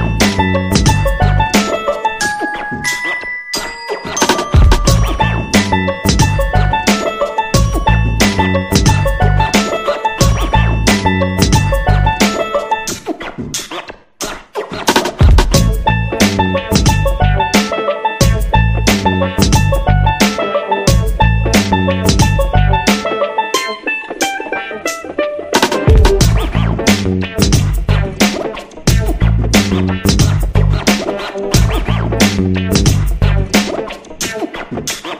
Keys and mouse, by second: 0.1 alt+z, 0.6 Tab, 1.4-2.2 middle drag, 2.3 middle drag, 2.6 KP_3, 3.2 shift+middle drag, 3.8 Tab, 4.3 g, 5.1 r, 9.1 right click, 9.3 g, 11.0 shift+middle drag, 12.4 right click, 12.7 g, 13.8 right click, 14.6 g, 16.1 r, 18.4 g, 19.8 Tab, 21.4-21.8 middle drag, 21.9-23.2 middle drag, 24.2 KP_3, 24.6 shift+middle click, 25.2 Tab, 25.5 a, 25.7 middle click, 26.4 s, 28.4 Tab, 28.9-29.9 middle drag, 30.2 Tab, 30.6 s, 32.0 Tab, 32.1 middle click, 32.7 Tab, 33.1 right click, 34.3 ctrl+l, 34.7 KP_1.